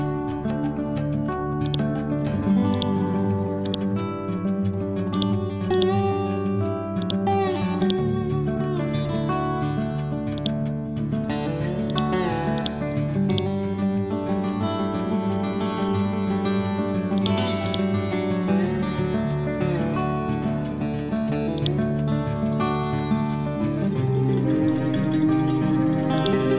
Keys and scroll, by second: 5.5 c, 18.6 Down.